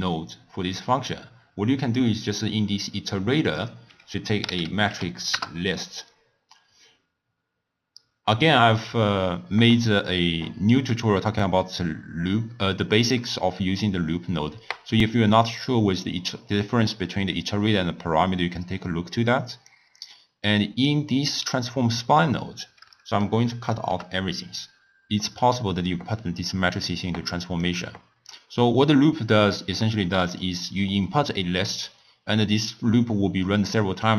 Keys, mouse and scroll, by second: 3.5-7.6 drag, 19.6 click, 21.1-23.2 middle drag, 23.2 ctrl+right click, 25.3 click, 27.6 click, 29.3-34.1 middle drag.